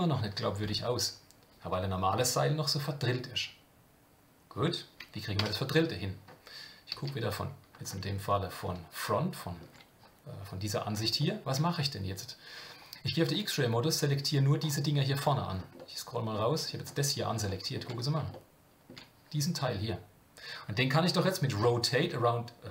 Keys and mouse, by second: 5.5 Tab, 6.9 KP_1, 8.3-9.6 shift+middle drag, 11.2 shift+middle click, 13.9 click, 15.8 middle click, 17.5 shift+middle click, 18.3 shift+middle click.